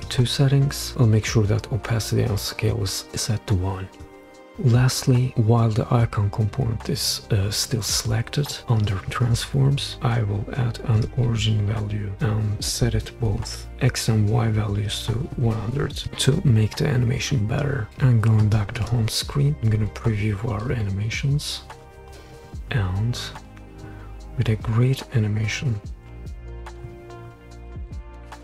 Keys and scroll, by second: 13.0-13.7 typing, 15.7-16.0 typing, 19.5 super+p.